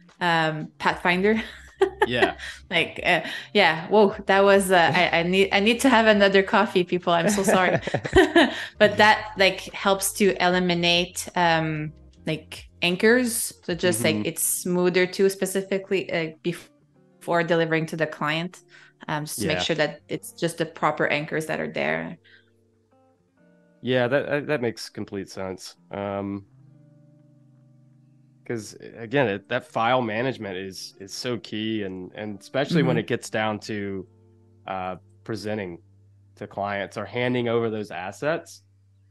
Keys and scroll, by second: 3.5 super+=, 3.6 space, 15.9 i, 17.3 a, 17.6 space, 19.6 z, 20.7 space, 22.8 a, 30.2 super+y, 30.9 super+y, 31.9 p, 35.1 super+u.